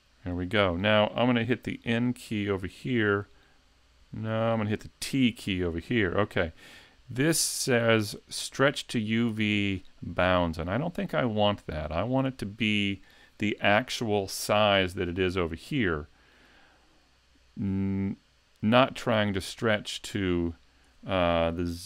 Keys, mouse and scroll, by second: 3.0 n, 3.3 n, 4.3 n, 5.0 t, 11.9 click.